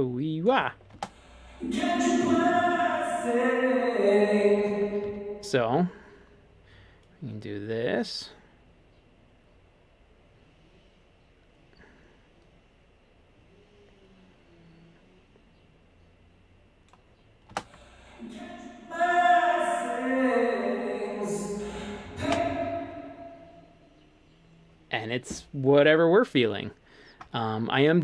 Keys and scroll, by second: 1.0 space, 4.6 space, 5.1 super+z, 17.5 space, 22.3 space.